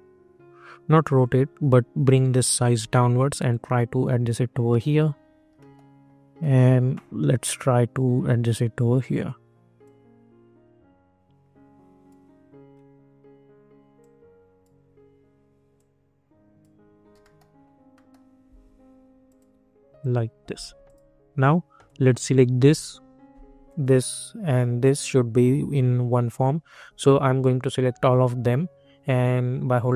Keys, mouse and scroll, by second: 1.4 scroll up 1, 2.6 e, 3.4-5.5 drag, 5.5 middle click, 7.9-12.7 drag, 12.7 scroll up 1, 13.9 click, 14.8 scroll down 1, 15.7-17.2 drag, 17.2 middle click, 19.2 click.